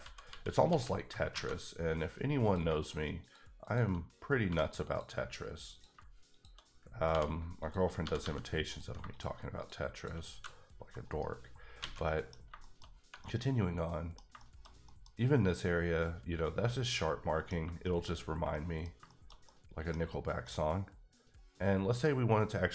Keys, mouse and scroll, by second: 0.0 ctrl+z, 0.3 ctrl+z, 0.7 ctrl+z, 1.3 alt+a, 2.4 click, 3.2 shift+double click, 3.6 shift+click, 4.5 f, 4.9 click, 5.7 click, 5.8 click, 6.3 shift+click, 7.1 j, 7.6 click, 8.0 g, 8.2 g, 8.7 click, 9.6 shift+double click, 10.3 g, 11.1 right click, 11.6 scroll down 3, 11.8 alt+a, 12.0 middle click, 12.3 scroll down 3, 12.6 shift+middle click, 12.8 scroll up 1, 13.2 middle click, 17.0 middle click, 17.8 shift+middle click, 18.1 scroll up 2, 18.5 middle click, 20.1 scroll down 1, 20.4 middle click.